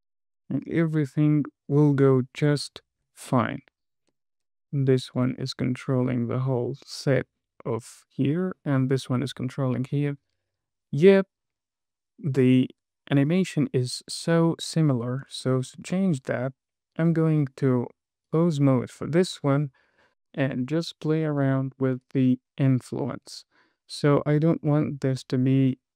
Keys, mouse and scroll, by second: 2.8 space, 2.9 click, 3.3 space, 4.5 space, 5.4 click, 6.3 click, 7.0 space, 14.7 space, 15.1-15.6 scroll up 3, 15.8 shift+middle click, 16.7 click, 17.6 Tab, 21.4-21.8 scroll up 1, 22.0 shift+middle click, 25.4 scroll down 2.